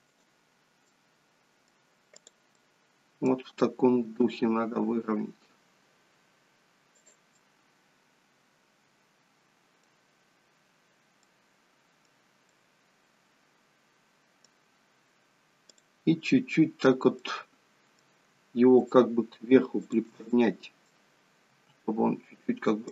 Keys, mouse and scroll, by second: 0.9 middle click, 2.2 click, 2.6 middle click, 4.2 r, 7.4 middle click, 11.2 middle click, 12.5 middle click, 15.7 click, 17.2 middle click, 18.8 shift+click, 20.4 middle click, 21.5 g.